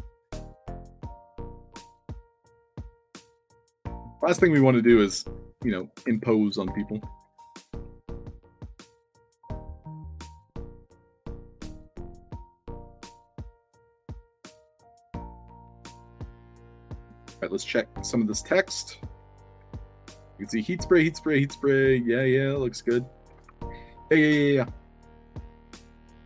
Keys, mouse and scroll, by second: 0.3 scroll up 2, 0.6-1.5 alt+drag, 1.7 space, 4.6 alt+click, 5.3-7.6 typing, 5.5 right drag, 6.1-6.6 alt+drag, 6.6 alt+d, 7.7 ctrl+d, 8.6-9.2 shift+drag, 9.6 ctrl+z, 10.5-11.5 drag, 11.6-14.4 typing, 12.1 alt+drag, 12.6 scroll up 2, 14.7-16.1 drag, 16.4-16.8 alt+drag, 17.0 Tab, 18.4-21.2 typing, 22.8 d, 23.3 Tab, 24.4-25.0 alt+drag, 25.0-26.2 typing.